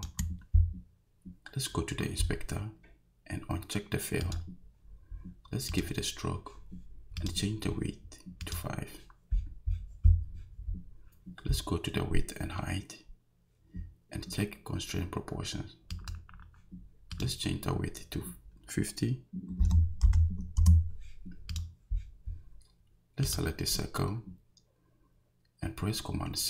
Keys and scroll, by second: 19.6 5, 20.0 0, 20.6 Return.